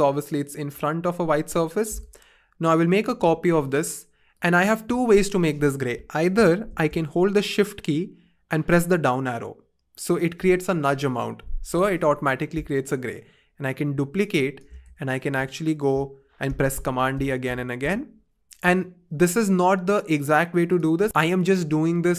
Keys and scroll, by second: 7.1 shift+Up, 7.8 shift+Down, 16.5 super+d, 16.8 super+d, 17.1 super+d.